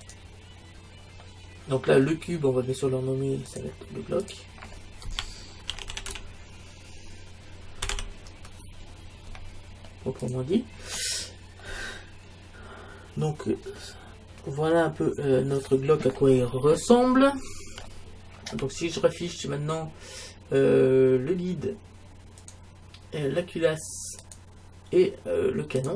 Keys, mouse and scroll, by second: 1.3-3.1 middle drag, 3.5-6.1 drag, 11.0-11.7 scroll up 1, 11.7-13.3 middle drag, 13.4 middle click, 16.5-18.3 middle drag, 22.4-25.9 drag.